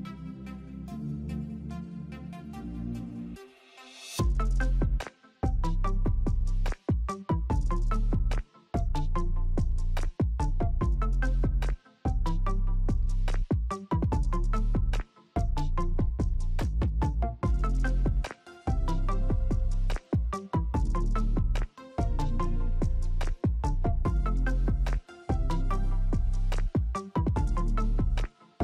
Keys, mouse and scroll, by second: 3.7 click, 10.2-17.0 drag, 17.8 click, 21.3 alt+click, 24.4 click, 26.3 click.